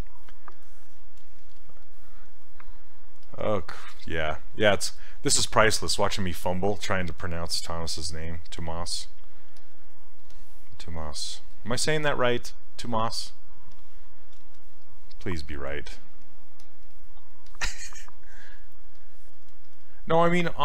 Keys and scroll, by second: 7.9 s.